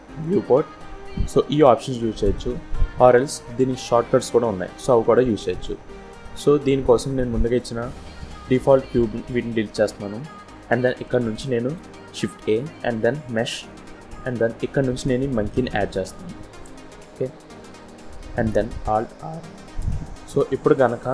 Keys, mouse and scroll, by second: 2.9 click, 5.3 click, 9.9 Delete, 11.4 shift+a, 16.5 scroll down 1, 18.8 alt+r, 20.3-20.7 scroll up 2, 20.8-21.1 scroll down 3.